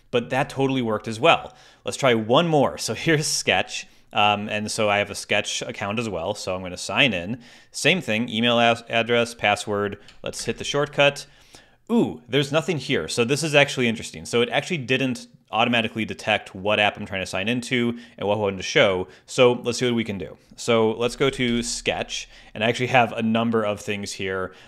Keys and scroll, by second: 0.3 super+h, 10.4 shift+super+space, 20.7-22.0 typing.